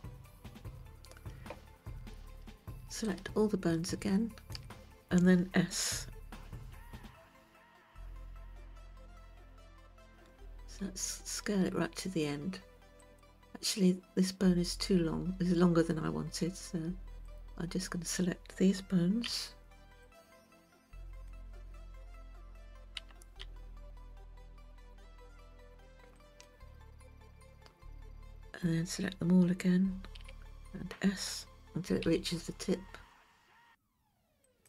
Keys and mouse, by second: 3.3-4.6 ctrl+right drag, 6.8 s, 17.3 click, 19.3 b, 23.0 g, 32.1 a, 32.1 s.